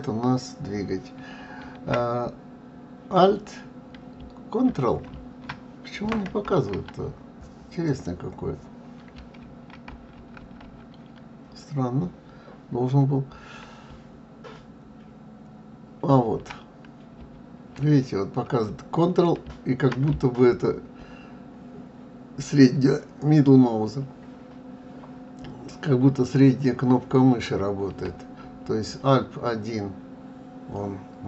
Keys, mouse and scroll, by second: 7.9 click, 14.8-17.8 ctrl+middle drag, 20.5-23.5 ctrl+middle drag, 28.9-31.2 middle drag.